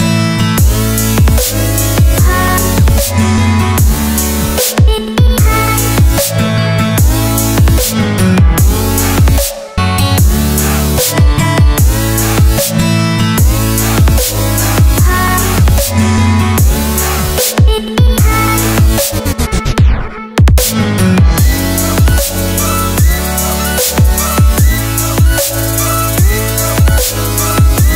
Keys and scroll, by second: 1.5 k, 5.9 super+z, 8.1 y, 12.1 y, 13.6 y, 19.2 |, 21.7 |, 23.6 l, 27.2 f.